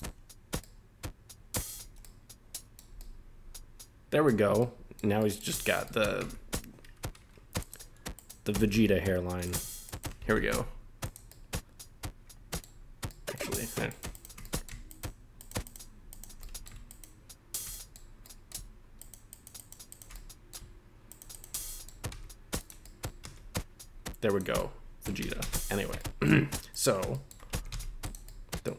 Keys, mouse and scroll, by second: 0.6-1.7 middle drag, 1.9 scroll down 2, 2.0-2.8 middle drag, 2.9 scroll up 1, 3.0-4.3 middle drag, 4.5 scroll up 2, 4.6-5.0 middle drag, 5.2 middle drag, 5.6 shift+middle click, 5.8 middle drag, 6.2 Tab, 7.6 click, 8.1 right click, 8.6 g, 8.7 g, 9.4 right click, 9.8 shift+right click, 10.2 g, 10.4 g, 11.0 click, 11.3-12.6 middle drag, 13.1 middle click, 13.9 right click, 14.1 shift+right click, 14.4 middle click, 14.9 shift+right click, 15.4 shift+right click, 15.6 shift+right click, 16.1 shift+right click, 16.4 middle click, 16.9 shift+right click, 17.7 middle click, 18.2 middle click, 19.0 shift+right click, 19.3 shift+right click, 19.6 shift+right click, 19.9 shift+right click, 20.1 middle click, 21.1 shift+right click, 21.3 shift+right click, 21.6 middle click, 21.6 scroll down 1, 22.1 e, 22.6 click, 22.8 middle click, 23.2 s, 24.3 click, 24.5 middle click, 25.2 ctrl+z, 25.4 ctrl+z, 26.0 middle click, 26.4 scroll up 1, 26.7 right click, 27.1 shift+scroll up 1, 27.1 shift+middle click, 27.5 g, 27.7 g, 28.0 click, 28.2 middle click.